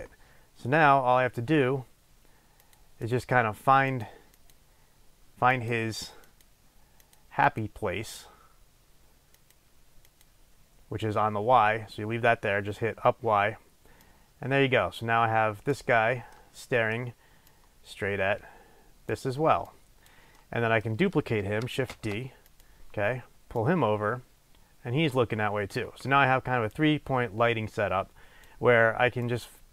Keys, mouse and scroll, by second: 2.8 click, 3.2 click, 4.5 click, 5.7 click, 6.4 click, 7.2 click, 7.6 click, 9.6-16.5 drag, 16.7-17.7 middle drag, 17.7-20.6 drag, 20.6 middle click, 21.0-22.1 middle drag, 22.1 shift+d, 22.8 click, 23.7-29.7 drag.